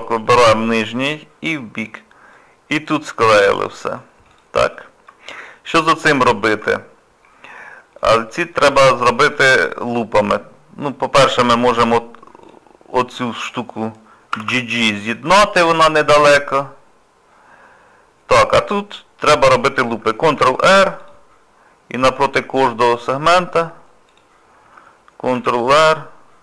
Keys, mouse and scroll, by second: 2.3 middle click, 3.7 shift+middle click, 4.3 click, 4.7 shift+middle click, 6.2 shift+middle click, 6.9 scroll down 2, 7.6 middle click, 7.6 scroll down 1, 8.3 shift+middle click, 8.7-9.2 scroll up 3, 9.4 middle click, 10.2-10.6 scroll up 2, 10.8 middle click, 12.4 click, 12.7 scroll down 2, 14.3 g, 15.6 scroll down 1, 16.0 middle click, 19.0 scroll down 1, 19.5 middle click, 20.4 ctrl+r, 25.4 ctrl+r.